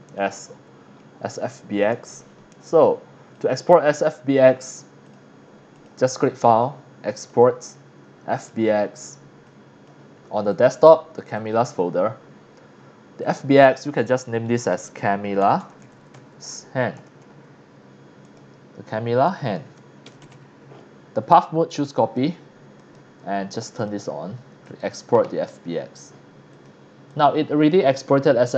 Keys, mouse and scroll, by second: 0.3 scroll down 1, 1.0 scroll up 2, 1.5 shift+middle click, 2.0-2.8 drag, 3.3 click, 5.1 click, 5.7 click, 6.2 click, 7.3 click, 8.3 click, 9.5 click, 10.5 click, 11.1 click, 11.3 click, 13.2 click, 14.7-17.2 typing, 18.2 click, 19.3 click, 19.8-20.8 typing, 21.7 click, 22.0 click, 22.8 click, 23.8 click, 24.6 click, 26.5 click, 27.1 click.